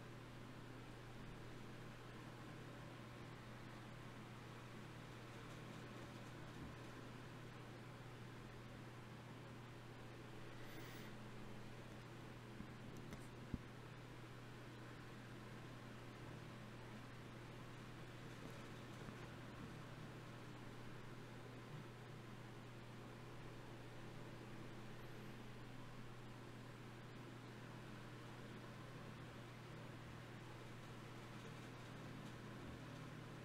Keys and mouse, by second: 1.4-2.6 middle drag, 2.6-5.6 right drag, 5.6-7.0 middle drag, 7.0 d, 7.2-9.0 drag, 10.7 middle click, 12.6 shift+q, 15.8-20.1 drag, 17.2 g, 18.4 g, 21.7 click, 23.9 d, 24.3-26.3 drag.